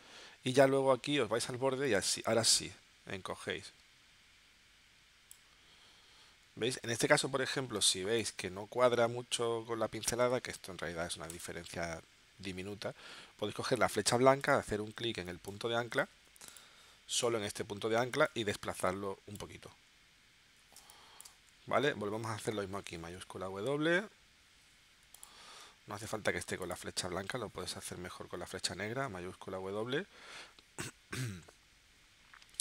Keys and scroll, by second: 7.8 space, 10.2 a, 20.8 space, 22.9 shift+w, 26.0 v, 28.8 shift+w.